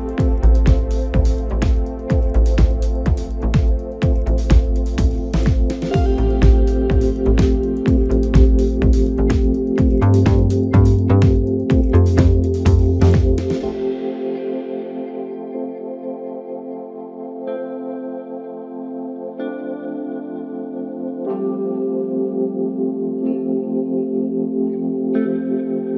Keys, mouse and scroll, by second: 0.3 click, 0.8 scroll up 2, 1.8 r, 5.4 g, 8.3 click, 8.6 scroll down 3, 8.9-11.3 middle drag, 11.3 KP_1, 12.0-13.1 scroll up 2, 13.1 s, 15.0 g, 17.8 ctrl+KP_7, 18.9-19.9 scroll up 1, 19.9-20.7 scroll up 1, 20.7 ctrl+a, 23.4 drag.